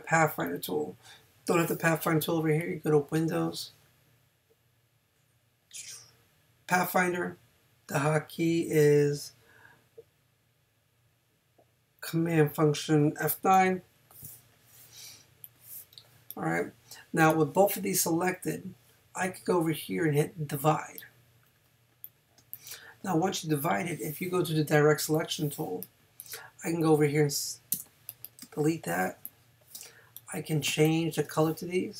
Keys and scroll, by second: 22.4 space, 27.7 BackSpace, 30.7 space.